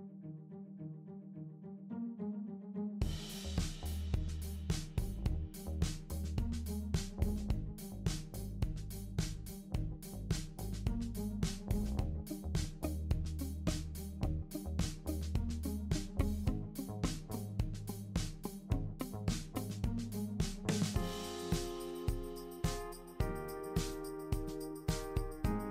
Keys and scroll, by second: 6.5 super+c, 6.6 super+v, 10.7 super+c, 10.8 super+v, 20.4 super+d.